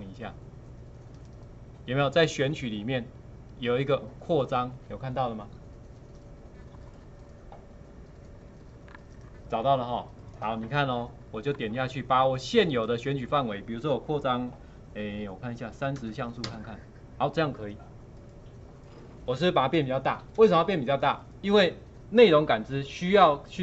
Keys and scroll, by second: 16.3 KP_0, 16.4 Return.